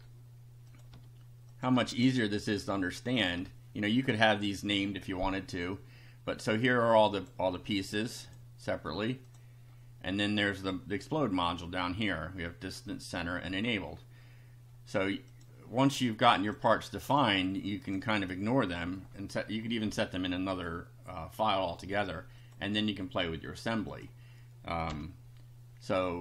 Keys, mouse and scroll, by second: 0.7 click, 0.9 BackSpace, 1.5 click, 1.8 BackSpace, 2.5 click, 2.7 BackSpace, 3.2 click, 3.4 BackSpace, 4.0 click, 7.2 click, 8.3 click, 9.3 click, 9.6 scroll down 1, 15.3 click, 16.5 click, 17.0 click, 17.8 click, 22.4 click, 23.9 click, 24.9 F5.